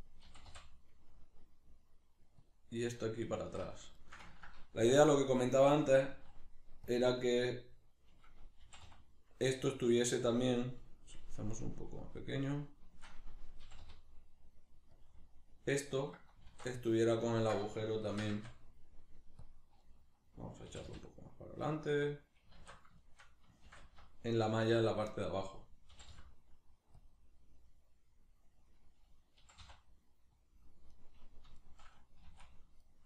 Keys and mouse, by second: 0.3 g, 2.5 click, 2.7-5.9 middle drag, 3.4 alt+q, 4.9 g, 5.9 click, 6.1 s, 7.0 click, 7.1-10.3 middle drag, 8.6 g, 10.3 click, 11.4-15.1 shift+drag, 13.6 g, 15.2-19.5 middle drag, 16.5 alt+q, 18.1 shift+d, 19.5 click, 19.8-22.1 middle drag, 20.7 g, 22.1 click, 22.6 alt+q, 23.0-24.9 shift+middle drag, 23.7 shift+d, 24.9 click, 25.0-27.1 middle drag, 25.9 g, 27.1 click, 27.2-30.5 middle drag, 29.4 g, 30.5 click, 30.9 right click, 31.6 shift+right click, 32.2 s.